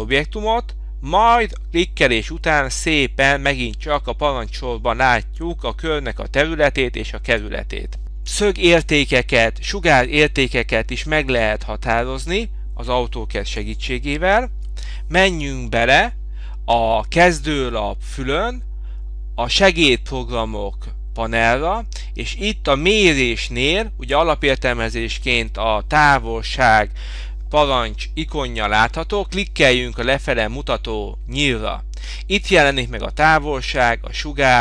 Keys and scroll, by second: 14.6 Escape.